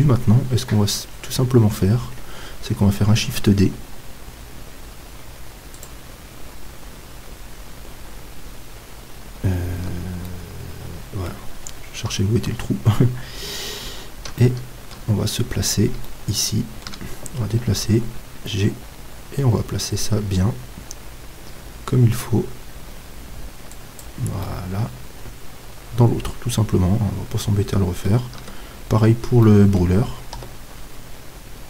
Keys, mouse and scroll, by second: 2.5-5.8 middle drag, 3.2 shift+d, 5.8-9.8 drag, 7.6-9.8 middle drag, 9.8 z, 10.3-12.1 middle drag, 12.1 KP_7, 13.3-17.7 middle drag, 17.7 g, 24.0-26.1 drag, 24.4-26.2 middle drag, 28.5 Tab, 30.4 KP_7.